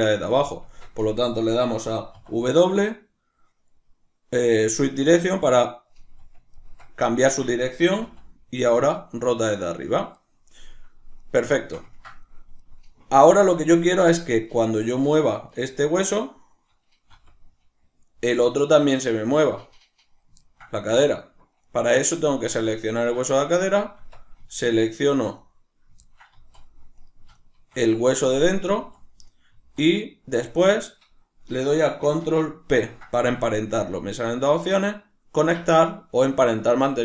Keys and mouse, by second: 0.0 right click, 0.6 Tab, 10.2 right click, 11.6-14.5 ctrl+shift+middle drag, 14.5 right click, 15.3 right click, 15.5 right click, 15.7 right click, 16.0 right click, 16.2 right click, 17.2 r, 18.4 right click, 20.4-21.6 ctrl+middle drag, 21.6 right click, 22.7-24.7 ctrl+middle drag, 23.9 Tab, 24.7 shift+right click, 25.3 right click, 26.1 ctrl+middle click, 26.3 z, 26.9 right click, 27.3 shift+right click, 28.6 z.